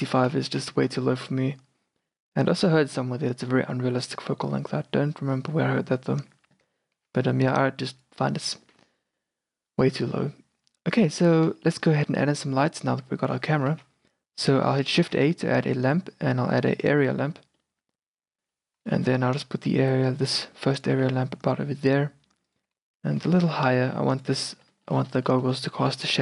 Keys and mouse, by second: 0.5 shift+f, 7.1 shift+f, 12.1-12.7 middle drag, 12.5 a, 12.7-13.5 drag, 13.0 q, 13.5 middle click, 13.8 shift+a, 15.2 shift+a, 17.3-18.0 drag, 18.6 q, 19.3 g, 21.0 r, 23.2 g, 25.1 middle drag.